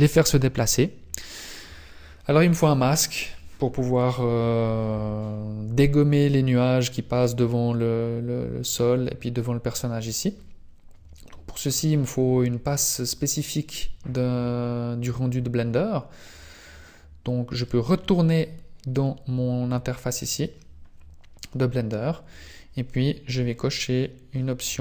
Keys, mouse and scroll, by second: 19.0-20.6 scroll down 1, 23.7-24.8 scroll down 19.